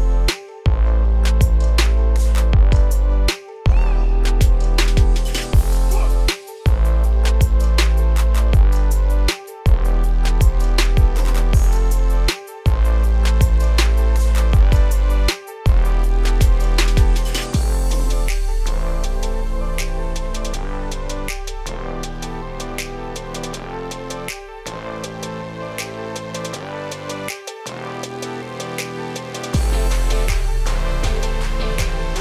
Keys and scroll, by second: 1.2 ctrl+space.